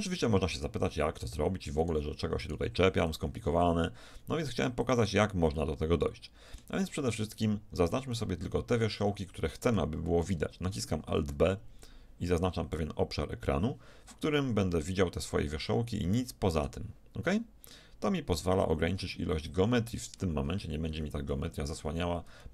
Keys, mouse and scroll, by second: 1.9-4.6 middle drag, 3.7 x, 5.6-7.6 middle drag, 6.9 z, 8.4-9.8 middle drag, 11.1 alt+b, 14.4-16.2 middle drag, 17.3-19.2 middle drag, 20.9 z, 21.3 middle click, 21.9 z.